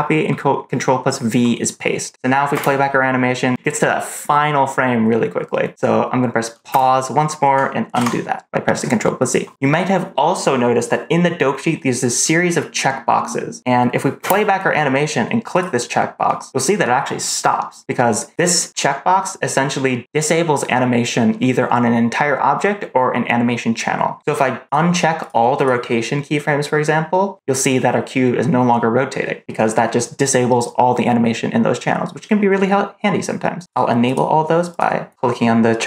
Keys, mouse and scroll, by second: 2.4 space, 6.6 space, 7.8 ctrl+z, 14.1 space, 15.4 click, 18.3 click, 25.1 click, 25.5 click, 33.9 click, 34.6 click.